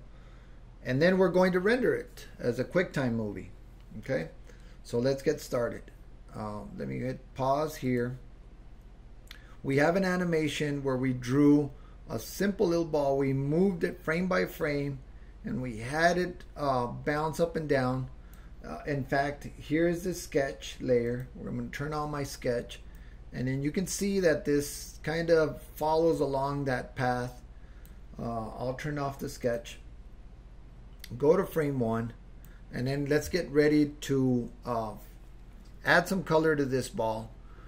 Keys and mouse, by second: 7.8 click, 9.9-18.6 drag, 21.1 click, 23.1-28.1 drag, 29.4 click, 31.6 click.